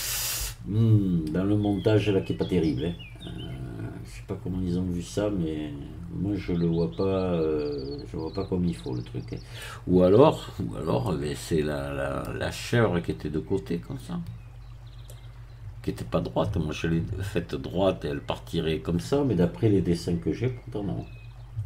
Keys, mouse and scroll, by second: 10.6-11.0 scroll down 1, 11.0-12.4 middle drag, 14.5 scroll up 1, 15.0-16.5 middle drag, 21.3 scroll down 1.